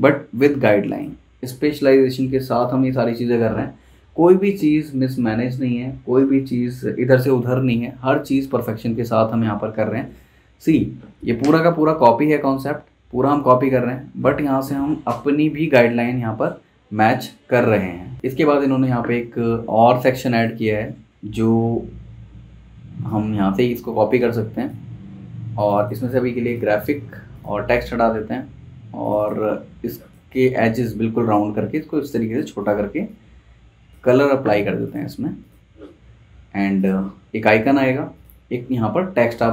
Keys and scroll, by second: 21.7 v, 26.9 BackSpace.